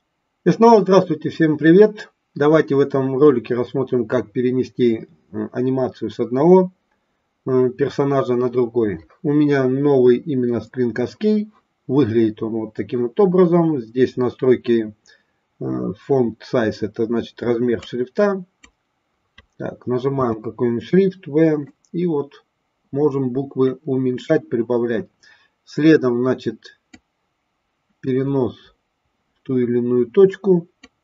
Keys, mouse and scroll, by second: 17.7 click, 21.9-23.9 drag, 27.0-28.7 drag, 29.0-30.9 drag.